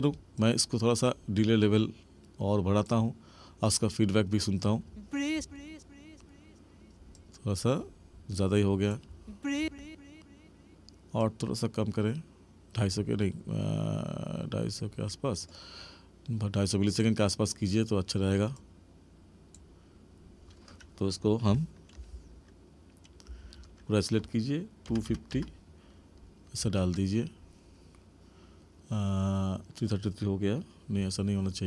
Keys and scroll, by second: 4.7 space, 9.0 space.